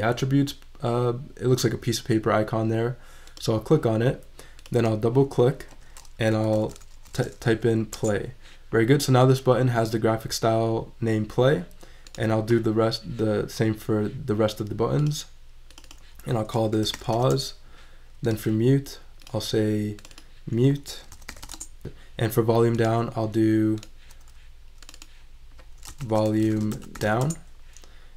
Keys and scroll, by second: 6.1-7.5 typing, 16.5-17.3 typing, 20.9-21.8 typing, 25.6-27.5 typing.